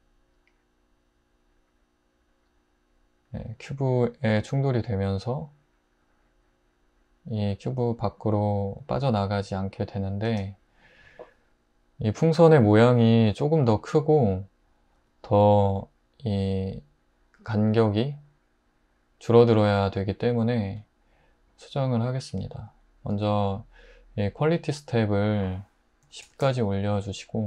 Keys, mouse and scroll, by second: 10.3 space, 26.1-26.4 typing.